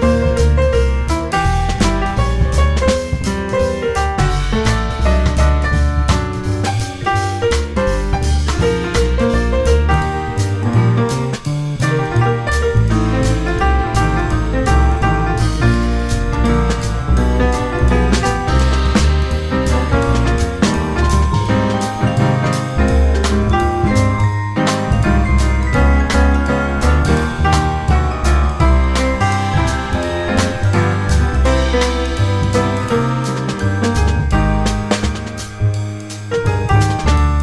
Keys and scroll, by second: 1.1 F4, 2.3 F4, 3.2 F4, 6.8 1, 7.2 2, 7.8 ctrl+r, 8.9 ctrl+c, 14.3 1, 15.5 ctrl+shift+e, 16.9 ctrl+shift+e, 19.5 2, 19.9 ctrl+r, 20.2 ctrl+c, 22.4 1, 23.2 ctrl+shift+e, 24.7 ctrl+shift+e, 25.5 w, 26.0 2, 26.8 ctrl+r, 27.3 ctrl+c, 29.6 1, 30.7 ctrl+shift+e, 32.3 ctrl+shift+e, 33.4 2, 33.7 ctrl+r, 34.1 ctrl+c, 35.7 1, 36.8 ctrl+shift+e.